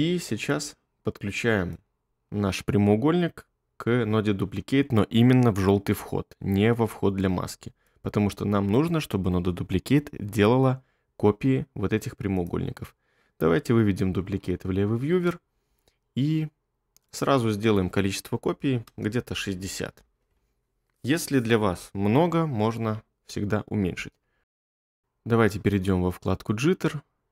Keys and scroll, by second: 14.4 1, 18.5-19.4 typing, 19.9 Return.